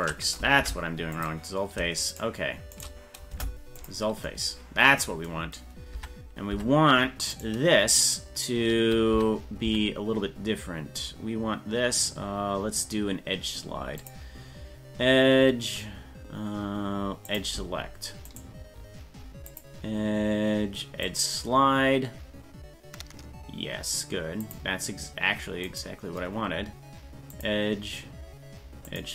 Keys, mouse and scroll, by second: 0.6 Delete, 2.1 shift+right click, 2.8 shift+right click, 3.3 Delete, 5.9 Tab, 6.7 Tab, 7.4 right click, 8.2 right click, 9.1 Tab, 9.7 Tab, 14.0-15.8 drag, 17.3 click, 18.3 right click, 19.5 click, 20.5 click, 21.0-22.9 drag, 22.9-24.5 drag, 25.7 right click, 27.3-29.1 drag.